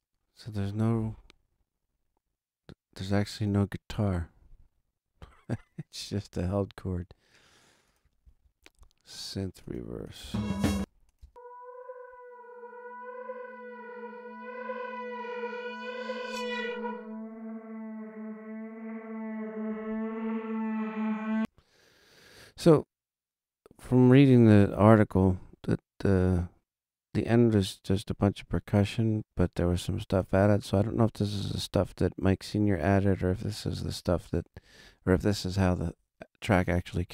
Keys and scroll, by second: 10.2 space, 21.3 space.